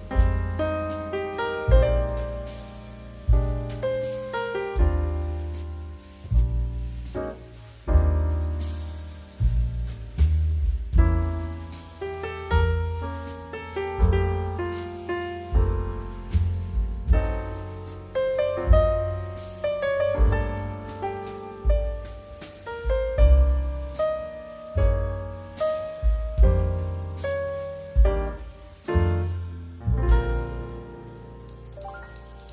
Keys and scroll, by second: 1.5 2, 18.5 space, 19.3 space, 19.6 ctrl+shift+s, 21.7 BackSpace, 21.9 BackSpace, 22.3 s, 22.3 t, 22.6 Tab, 26.7 space, 31.7 1.